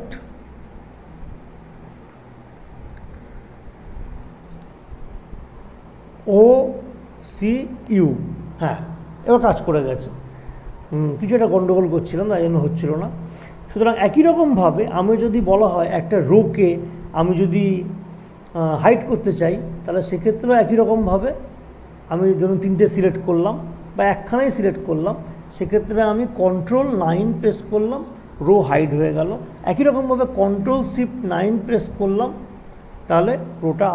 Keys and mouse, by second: 6.2 typing, 7.7-8.5 typing, 11.1 click, 13.7 typing, 21.1-24.6 drag, 24.6 click, 27.2 ctrl+9, 30.4 ctrl+9, 32.8 ctrl+shift+9.